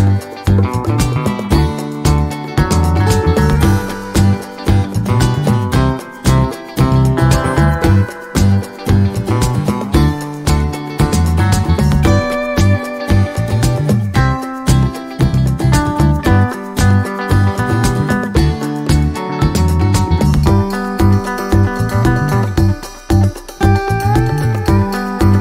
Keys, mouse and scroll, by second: 1.5-2.8 drag, 3.3 click, 4.7 d, 5.0 click, 6.0 click, 6.9 click, 7.6-8.7 ctrl+drag, 9.3 ctrl+d, 10.1 ctrl+click, 10.5 ctrl+middle click, 11.3-12.8 ctrl+drag, 13.3 d, 13.6-14.7 ctrl+drag, 15.1 click, 16.3-17.8 drag, 18.6 click, 19.1 click, 19.7-21.8 drag, 22.0-25.4 drag.